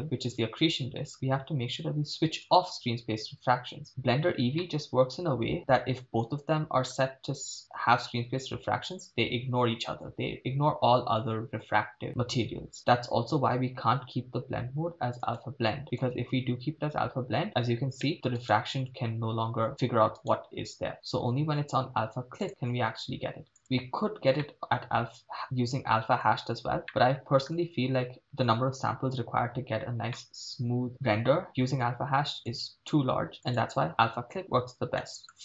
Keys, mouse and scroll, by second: 0.0-0.9 scroll down 8, 2.5 click, 4.8-7.0 middle drag, 15.2-16.4 drag, 18.0 middle click, 18.5-19.5 right drag, 20.3 right click, 20.9-21.5 scroll down 2, 21.5-22.4 scroll down 3, 22.4 scroll down 1, 22.4-23.6 drag, 24.6-26.2 middle drag, 26.6 scroll up 3, 26.9-27.5 shift+middle drag, 30.3-30.9 middle drag, 32.4-33.6 drag, 34.4-35.0 scroll down 3, 35.1 middle click.